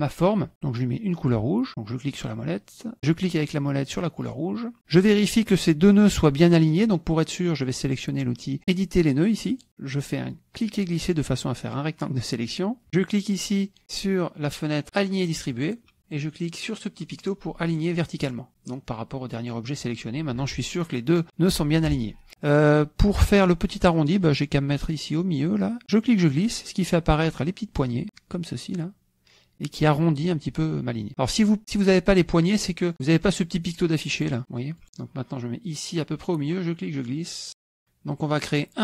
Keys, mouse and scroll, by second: 4.3 click, 9.5 click, 10.3-12.5 drag, 15.5 click, 22.1 click, 25.8-28.0 drag, 33.5 click, 34.2 click, 34.8 click, 36.5-37.8 drag.